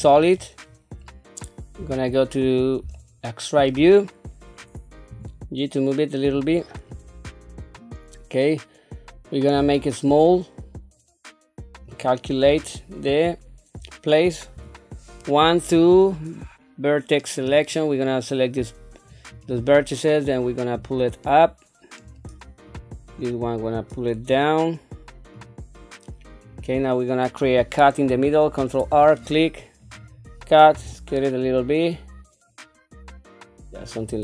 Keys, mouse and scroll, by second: 0.9-1.8 scroll up 3, 1.8 q, 2.9 shift+middle click, 5.1 g, 9.5 s, 12.6 shift+middle click, 14.5 1, 15.7 click, 16.0-17.4 drag, 19.3 click, 20.8-22.0 drag, 22.7 click, 24.3-26.6 drag, 28.0 ctrl+r, 30.7 s.